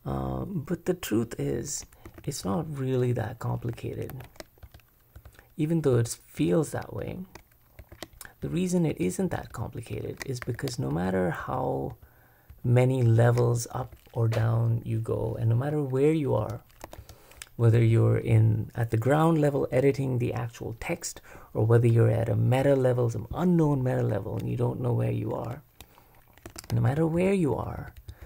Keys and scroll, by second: 2.1 super+v, 4.1 super+w, 4.6-13.8 typing, 15.0 k, 16.4-17.7 typing, 26.5 super+v, 26.9 shift+k, 27.1 shift+k, 27.5 shift+k.